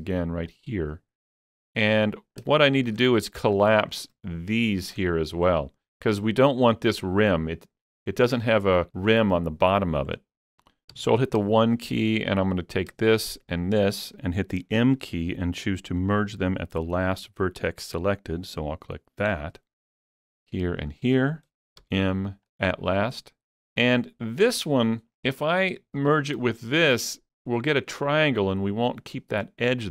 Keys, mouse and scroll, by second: 0.5 click, 0.5-0.9 scroll up 1, 2.7-7.9 shift+middle drag, 10.2-11.6 shift+middle drag, 11.0 1, 12.4 click, 13.6 shift+click, 14.7 m, 18.9 shift+click, 18.9 m, 20.9 shift+click, 21.8 m, 25.2 click, 26.1 shift+click.